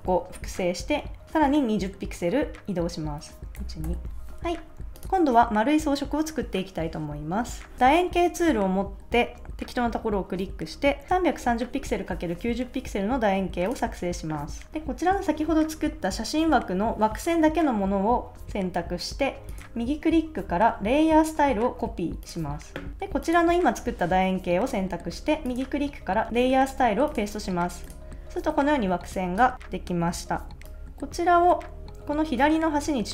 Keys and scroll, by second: 0.4 super+j, 3.5 shift+Left.